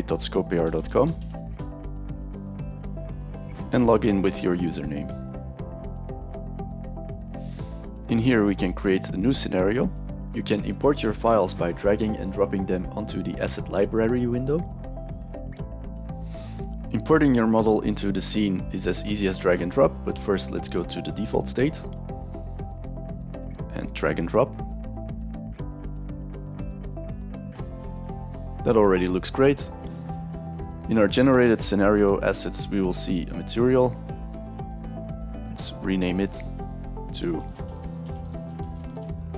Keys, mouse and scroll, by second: 0.4-1.6 typing, 3.9-6.9 drag, 21.6 click, 23.7-24.7 drag, 30.5 click, 33.2 click, 34.1 click, 34.7 right click, 36.2 click, 37.8-39.3 typing.